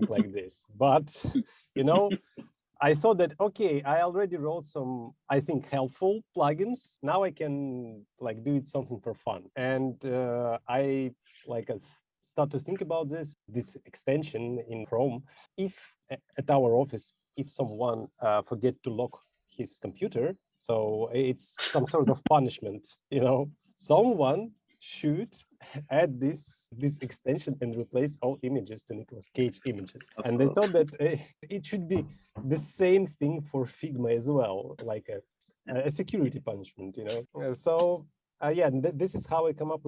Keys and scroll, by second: 10.7 super+..